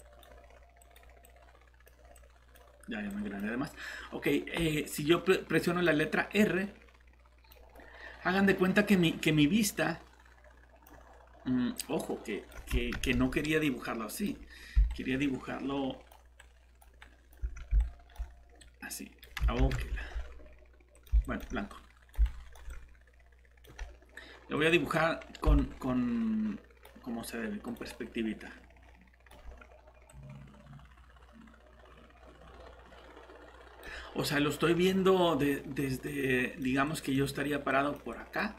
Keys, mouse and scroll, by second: 12.9 ctrl+alt+z, 14.9 right click, 18.6 click, 19.6 ctrl+z, 22.2 right click, 22.7 click, 25.6 right click, 27.7 click, 27.9 right click, 30.1 click.